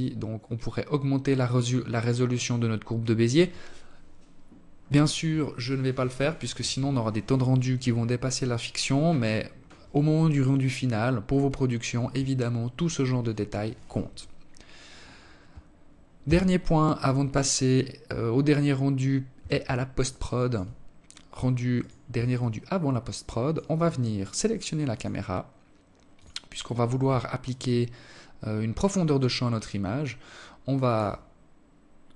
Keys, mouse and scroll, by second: 14.5 Escape, 18.3 alt+click, 19.0-19.8 scroll down 1, 19.8 scroll down 1, 20.0 right click, 20.6 alt+click, 23.1 click, 24.4 click, 25.7 alt+click.